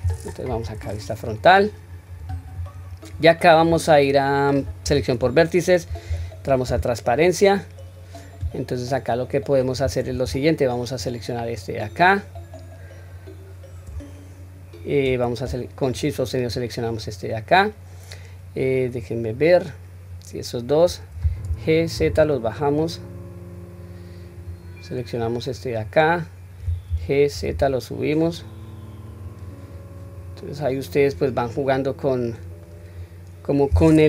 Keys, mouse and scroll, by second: 0.5 KP_1, 0.9 scroll up 1, 2.0-2.9 scroll up 1, 6.1 q, 11.0-11.6 drag, 15.9-16.5 shift+drag, 25.4-25.8 drag, 26.9 g, 30.4-30.9 middle drag, 31.1-31.5 scroll down 1, 31.5-32.7 middle drag, 32.9-33.5 scroll up 1.